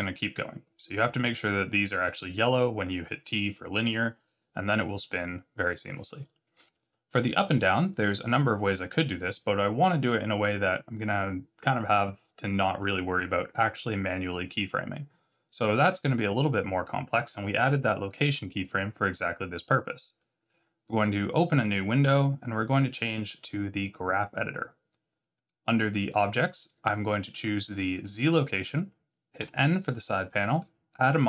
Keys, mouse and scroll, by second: 6.5 click, 16.6 click.